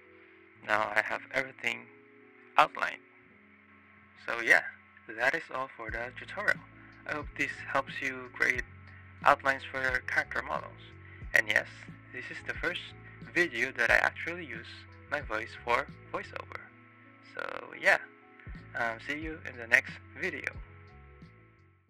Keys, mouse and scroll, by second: 0.5 drag, 0.9 click, 4.0 drag, 4.5 shift+drag, 4.8-5.1 shift+drag, 5.3-6.0 drag, 6.6-8.8 drag, 9.0-9.4 drag, 11.0 drag, 11.3-13.0 drag, 14.4-14.8 drag, 15.4-16.1 drag, 16.4 drag, 16.9-17.3 drag, 17.5-17.8 drag, 18.0-18.4 shift+drag, 18.6 click, 19.1 click, 19.6-20.3 drag.